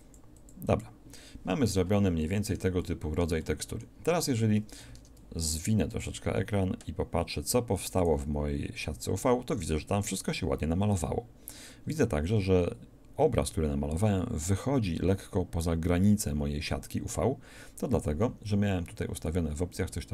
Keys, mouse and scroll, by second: 4.9 shift+space, 11.5-12.5 scroll up 1, 18.7-20.1 scroll down 3.